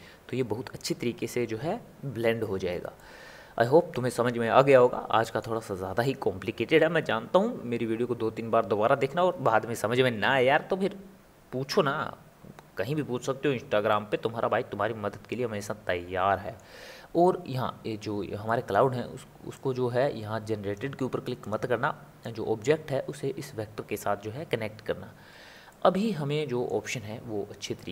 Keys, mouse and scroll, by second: 3.0-7.8 middle drag, 13.9-19.8 middle drag, 19.8 click, 22.4 click, 25.7-27.9 middle drag.